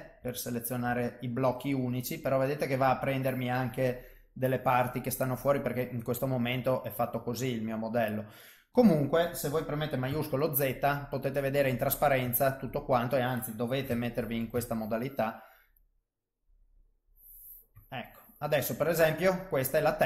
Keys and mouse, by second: 0.2 l, 0.9 l, 1.7 middle click, 2.9 l, 3.4 middle click, 4.8 middle click, 5.8 middle click, 10.1 shift+z, 10.7 middle click, 12.3 ctrl+middle click, 12.7 middle click, 13.8 KP_3, 14.7 ctrl+shift+right click, 17.9 middle click.